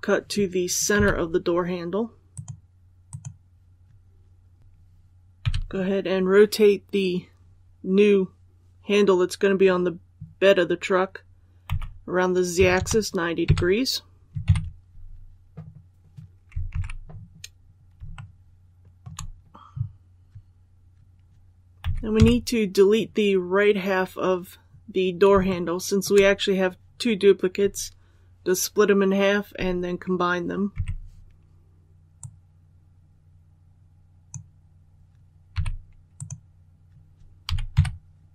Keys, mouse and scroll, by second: 2.3 click, 4.6 l, 12.5 KP_9, 14.4 KP_1, 16.6 alt+a, 17.2 scroll up 1, 18.1 shift+middle click, 18.2-18.7 shift+scroll up 1, 21.7 z, 22.1 KP_4, 24.3 scroll up 1, 25.4 shift+middle click, 30.7 b, 32.1-34.5 drag, 35.5 x, 36.1 click, 37.4 z, 37.7 KP_6.